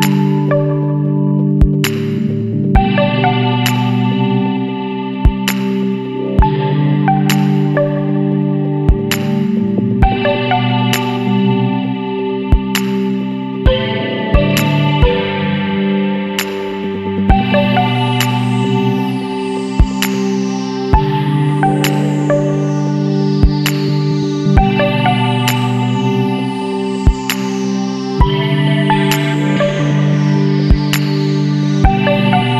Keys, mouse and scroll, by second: 0.1 click, 2.3 click, 3.7 click, 5.1 click, 5.5 click, 6.4 KP_1, 6.6 KP_0, 7.0 KP_Enter, 8.9 click, 10.5 KP_6, 10.8 KP_8, 11.3 KP_Enter, 12.8-15.3 drag, 16.6 Down, 17.5-17.9 scroll up 2, 20.0 click, 20.9 click, 21.8 click, 24.1 click, 26.0 click, 27.6 click, 28.9 click, 30.8 click.